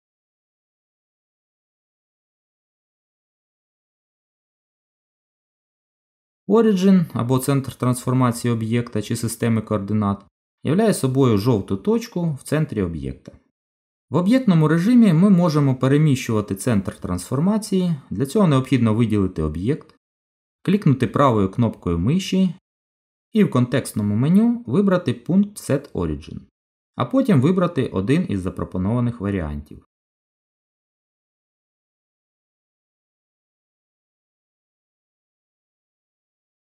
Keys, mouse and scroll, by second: 0.3-2.3 click, 4.7 n, 9.7 click, 21.6 right click, 35.0 right click.